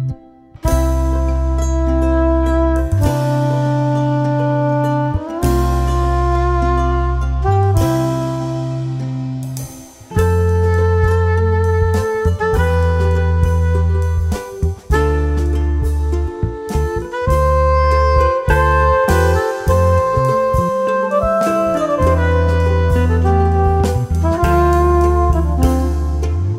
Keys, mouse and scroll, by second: 0.8 F2, 1.0-3.0 drag, 3.0-5.7 drag, 5.9 F2, 6.1-17.1 drag, 17.1 F3, 17.4 F2, 17.6-24.0 drag, 24.7 right click, 25.8 click.